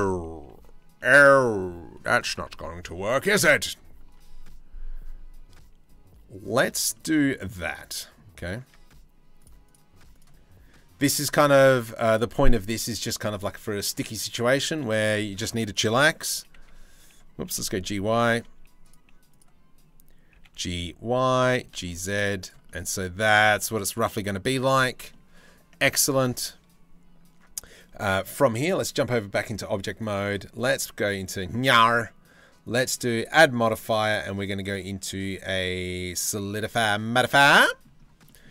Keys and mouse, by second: 0.6-3.5 drag, 3.7 Delete, 6.5-7.8 drag, 8.3 Tab, 9.0 click, 9.8-11.1 drag, 11.7 click, 13.4 click, 14.7 click, 15.9 g, 16.1 x, 17.0 g, 17.3 y, 18.4 click, 18.9 click, 19.9 g, 21.3 g, 22.3-23.7 drag, 24.7 click, 29.1 click, 32.5-36.9 drag, 37.2 middle click.